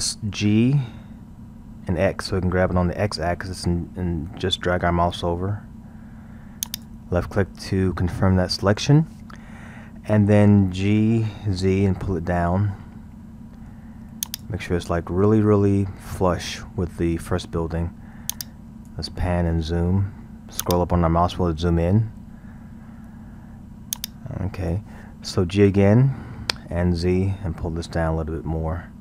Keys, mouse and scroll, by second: 1.0 g, 10.8 g, 15.4-17.7 scroll, 18.3-19.3 drag, 19.3 scroll, 20.6-21.8 drag, 21.8 scroll, 24.0-26.2 drag, 26.2 g.